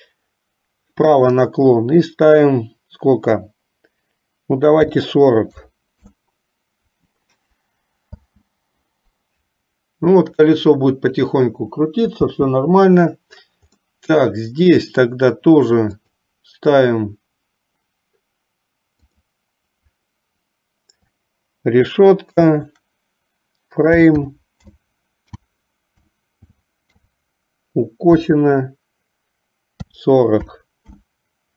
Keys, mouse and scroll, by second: 8.2 space, 12.4 space, 14.1-15.3 middle drag, 19.3-31.2 drag.